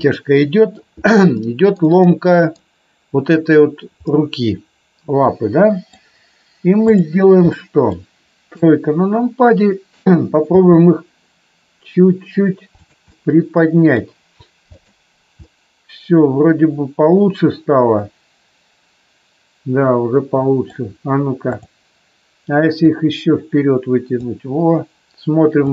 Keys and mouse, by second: 0.0-0.7 middle drag, 1.3-2.4 middle drag, 4.0-6.0 middle drag, 7.5 middle click, 8.5 KP_3, 10.5 g, 13.1-14.0 middle drag, 14.6 click, 15.4-20.7 middle drag, 22.9-24.3 drag, 25.6 click.